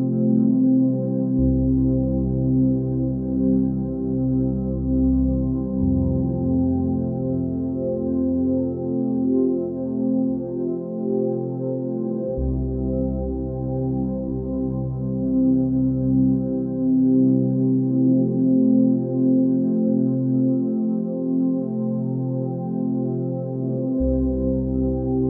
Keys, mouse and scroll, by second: 11.0 space, 11.1 right click, 11.6 click, 11.8 v, 12.1 space, 12.4-13.0 ctrl+drag, 13.9 space, 14.1-14.8 ctrl+drag, 16.7-17.4 ctrl+drag, 17.8 right click, 18.0 click, 18.0 click, 18.8 ctrl+click, 18.9-19.5 ctrl+space, 20.5 click, 21.3 space, 21.4 right click, 21.6 click, 24.6 ctrl+space, 25.0 ctrl+click, 25.2 ctrl+space, 25.2 ctrl+click.